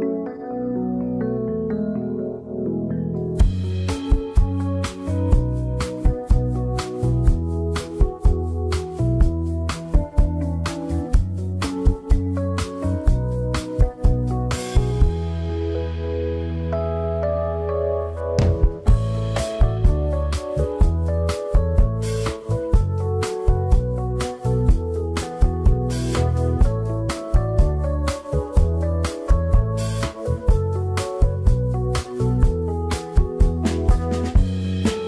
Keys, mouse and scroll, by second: 1.8 click, 3.4 click, 4.8-5.6 scroll up 2, 5.6 click, 7.8 c, 9.2-10.6 scroll up 9, 9.5 shift+middle click, 10.6 shift+middle click, 11.0-11.6 scroll up 1, 11.6-12.9 shift+middle drag, 12.9-16.8 drag, 19.7-20.7 drag, 23.7 shift+middle click, 23.9 scroll up 4, 25.2-28.3 shift+drag, 28.9-29.8 scroll down 19, 29.8 shift+middle click, 30.2-30.5 scroll down 6, 30.5-32.6 shift+middle drag, 32.6 3, 33.1-34.2 drag, 34.2 3, 34.6 click.